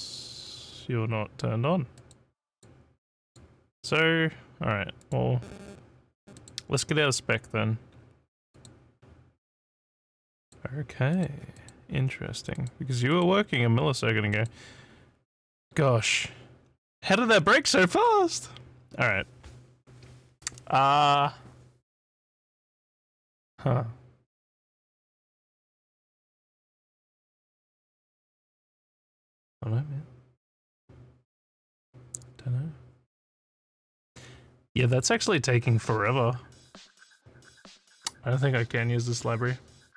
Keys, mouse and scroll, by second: 2.0 click, 2.5 click, 3.2 click, 5.0 click, 6.3 click, 8.5 click, 10.3 click, 11.1 click, 11.5 click, 12.5 click, 13.1 click, 14.3 click, 17.1 scroll, 17.9 click, 34.9 click.